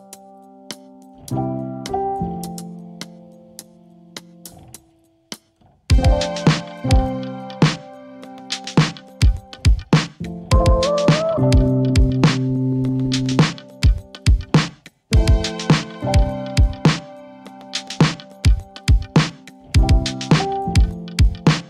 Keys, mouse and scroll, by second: 11.4-16.3 drag, 16.1 right click, 17.2-18.6 drag, 19.7-21.6 typing.